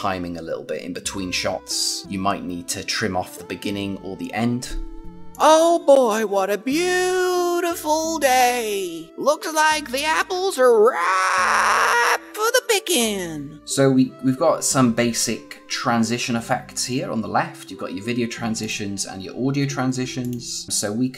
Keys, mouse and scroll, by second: 5.3 click, 18.5 click.